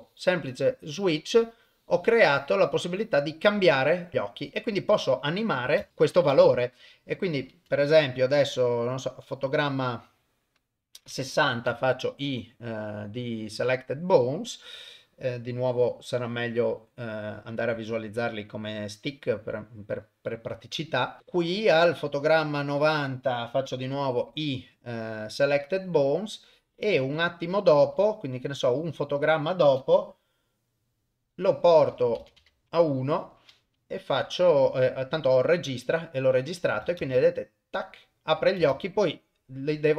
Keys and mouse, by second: 5.8 shift+space, 6.4 shift+space, 8.2 click, 17.9 click, 18.3-19.2 drag, 21.2 click, 26.4-27.3 drag, 27.9 Right, 32.0 click, 36.4-36.8 drag, 37.0 shift+space, 38.7 shift+space, 39.1 click.